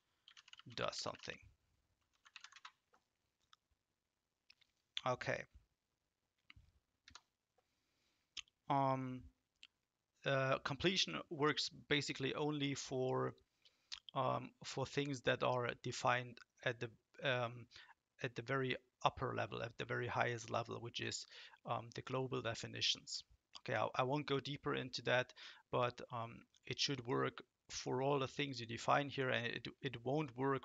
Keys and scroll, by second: 0.0-2.9 typing, 7.0 Return.